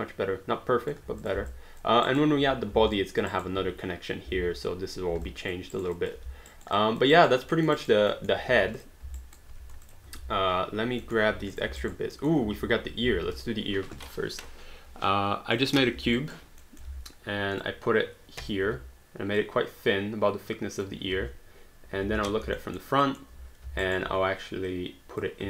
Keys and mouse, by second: 1.2 click, 1.5 alt+click, 2.1 alt+right click, 2.9 alt+click, 3.3 alt+right click, 5.3 alt+click, 5.8 alt+right click, 5.9 alt+click, 6.2 alt+d, 6.5 alt+right click, 6.7 alt+click, 7.1 alt+right click, 7.6 alt+middle click, 7.8 alt+right click, 8.1 alt+middle click, 8.5 q, 8.8 click, 9.2 alt+right click, 9.5 q, 9.8 shift+click, 11.0 alt+middle click, 11.5 shift+click, 11.9 alt+right click, 12.4 alt+middle click, 12.5 alt+d, 16.2 alt+right click, 16.6 alt+middle click, 17.6 click, 19.0 r, 19.4 click, 21.1 space, 22.6 alt+middle click, 23.9 alt+right click, 24.7 click.